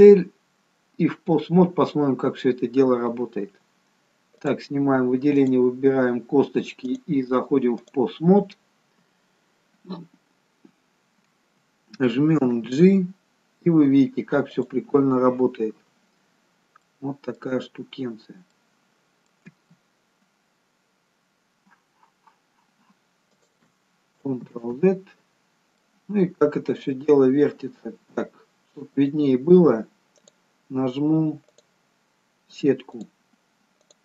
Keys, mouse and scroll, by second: 4.5 click, 5.5 click, 12.7 g, 16.7 scroll up 3, 17.0 middle click, 18.0-18.7 scroll down 2, 18.7 middle click, 18.7-19.6 scroll down 1, 19.6 g, 24.9 ctrl+z, 25.6-26.0 scroll down 2, 26.0 middle click, 29.1 click, 30.4 click.